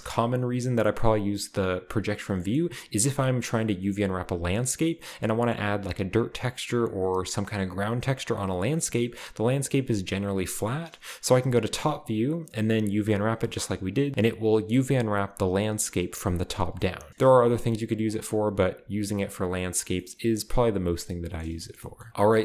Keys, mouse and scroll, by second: 0.0-2.2 middle drag, 2.2-3.8 scroll down 1, 4.9-5.5 scroll down 1, 5.5-6.1 scroll up 1, 6.1 scroll up 1, 8.3-9.0 scroll down 2, 9.0 scroll down 1, 9.3 middle click, 10.6 middle click, 11.3-13.4 scroll up 2, 13.4 middle click, 13.8 a, 14.0 a, 14.1-14.9 scroll down 2, 16.6-17.2 scroll down 1, 16.8-18.0 middle drag, 17.4 s, 18.0-20.6 drag, 18.7 s.